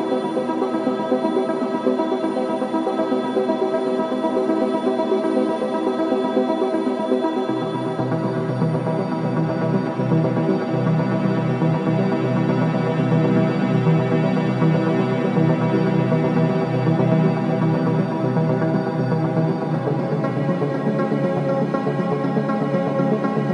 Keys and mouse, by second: 0.0 Return, 1.0 r, 1.2 y, 2.4 click, 4.2 r, 5.3 y, 8.7 click, 10.6-12.9 drag, 13.3 click, 15.1 click, 16.2-17.6 typing, 16.3 click, 18.7 click, 19.3 click, 20.5-23.5 drag.